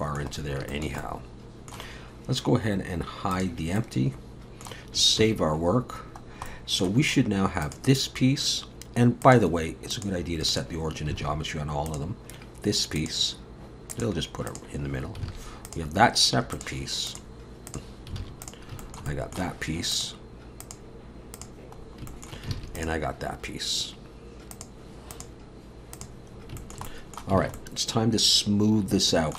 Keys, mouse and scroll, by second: 0.4 scroll down 2, 0.7 shift+middle click, 1.0 middle click, 3.3 click, 3.8 middle click, 5.9 ctrl+s, 6.3 scroll down 1, 6.5 middle click, 7.0-7.6 scroll up 1, 7.6 click, 7.6 scroll up 1, 9.2 click, 11.2 alt+a, 11.9 click, 13.0 click, 14.9-15.2 scroll up 3, 15.3 alt+a, 15.7 click, 16.6 click, 18.2 alt+a, 18.4 click, 18.8 shift+middle click, 19.1 middle click, 19.9 click, 21.8 scroll down 3, 22.1 shift+middle click, 22.6 alt+a, 22.8 click, 24.5 click, 26.3 scroll up 2, 26.6 shift+middle click, 26.9 middle click, 27.4 alt+a.